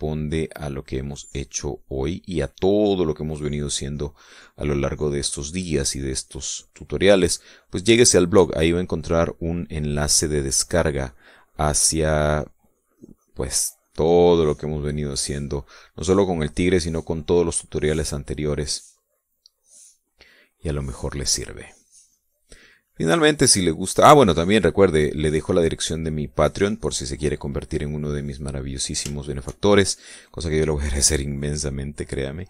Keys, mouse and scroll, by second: 0.6 click, 1.5-2.4 scroll up 2, 1.6 middle click, 2.4-7.6 drag, 7.7-9.1 middle drag, 9.2-11.2 shift+middle drag, 12.0-14.0 drag, 14.1-17.9 drag, 18.2 click, 18.9-21.9 drag, 22.2-24.7 drag, 25.0-26.8 drag, 27.2-28.3 drag, 30.4 shift+middle click, 32.0-32.4 drag.